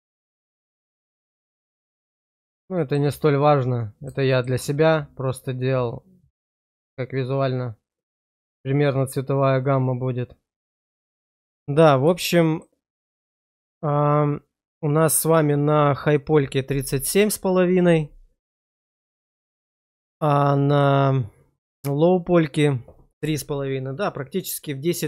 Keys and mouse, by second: 0.3-2.9 middle drag, 3.4 middle click, 4.2 shift+middle click, 4.7-9.0 middle drag, 9.5-11.4 middle drag, 12.2 shift+middle click, 12.8 middle click, 13.3 click, 19.7 click, 20.6 click.